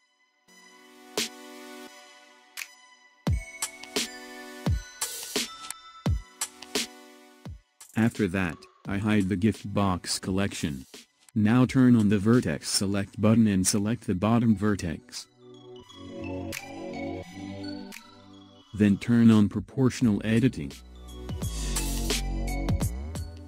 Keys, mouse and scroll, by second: 5.3 click, 9.7 click, 11.5 Tab, 13.8 click, 15.3-17.3 middle drag, 17.3 click, 18.7 KP_1, 22.0 click.